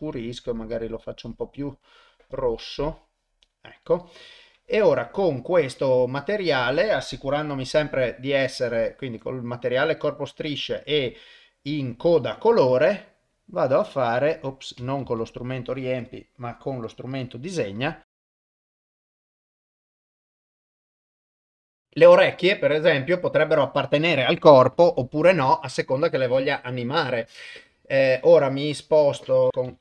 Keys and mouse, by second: 9.7 y, 13.4-16.0 drag, 16.8 click, 18.1 click, 18.5 click, 18.9 click, 19.2 click, 19.5 click, 19.9 ctrl+z, 19.9 click, 20.3 click, 20.6 click, 20.9 click, 21.3 click.